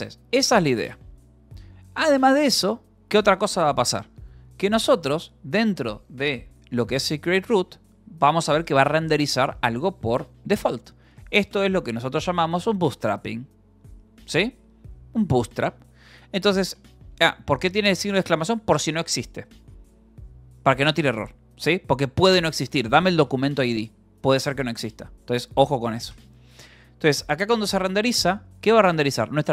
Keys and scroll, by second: 0.0 Escape, 0.1 u, 8.6 l, 9.0 e, 11.3 j, 11.7 j, 12.6 Escape, 16.2 k, 17.1 e, 18.2 h, 18.6 a, 20.7 Escape, 20.8-22.8 typing, 23.5 Escape, 26.2-29.5 typing, 28.1 Escape.